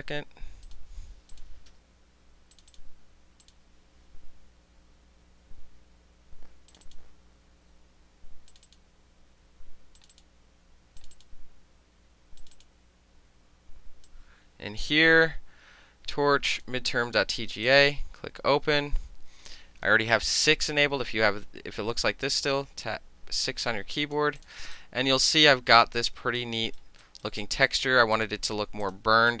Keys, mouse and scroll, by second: 0.7 click, 1.4 click, 1.8 d, 2.6 click, 2.8 click, 3.5 click, 4.1 m, 4.5 m, 5.1 m, 6.8 click, 6.9 click, 8.6 click, 8.7 click, 10.1 click, 10.2 click, 11.1 click, 11.2 click, 12.5 click, 12.6 click, 14.2-14.9 drag, 16.6 click, 17.7 click, 21.1 5, 23.4 alt+click, 24.5 alt+click, 24.8-26.5 alt+drag, 26.7 alt+right click, 27.1 alt+right click, 27.5 alt+middle click, 27.5 alt+click, 27.8 alt+middle click, 28.2 alt+click, 28.3 alt+middle click, 28.9 click, 29.0-29.4 alt+middle drag.